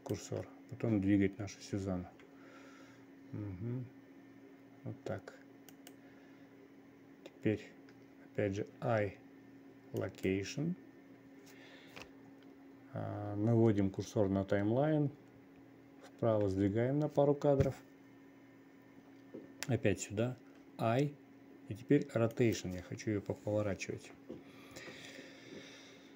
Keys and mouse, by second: 2.6 g, 16.6 Right, 17.0 Right, 21.2 i.